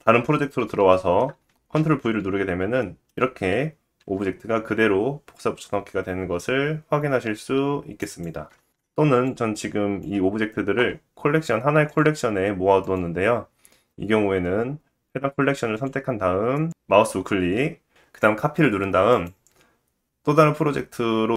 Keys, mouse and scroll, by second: 0.0 middle click, 0.0-0.4 scroll down 2, 1.9 ctrl+v, 2.8 shift+middle click, 4.1 g, 5.2-21.3 middle drag, 8.3 ctrl+z.